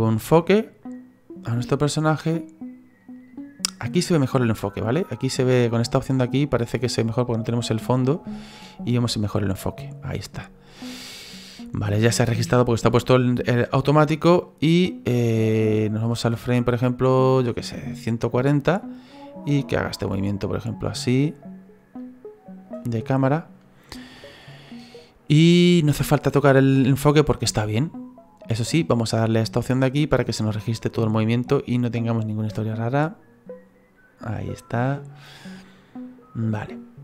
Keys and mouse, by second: 4.5 click, 6.6 click, 14.4 click, 19.1 middle click, 28.8 click, 30.0 click, 31.2 click.